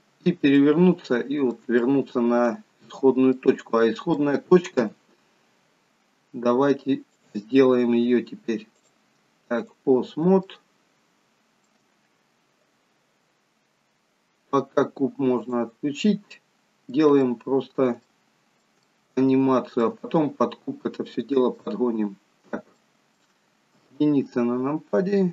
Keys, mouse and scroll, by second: 0.9 middle click, 1.9 shift+middle click, 3.4 middle click, 4.8 KP_3, 6.0 scroll up 2, 7.1 click, 8.7 click, 10.5 shift+middle click, 15.6 click, 16.1 middle click, 17.4 shift+middle click, 18.1 middle click, 18.8 shift+middle click, 20.0 middle click, 21.9-22.8 scroll up 2, 22.8 middle click, 22.8 scroll up 1, 23.8 KP_1, 24.7-25.3 scroll down 3.